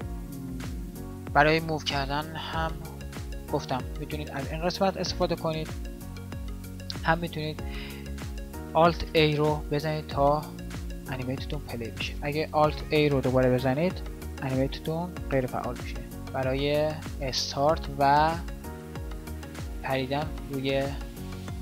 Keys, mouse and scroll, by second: 9.0 alt+a, 13.6 alt+a, 15.8 Right, 17.6 shift+Right, 20.6 shift+Left, 21.3 shift+Right.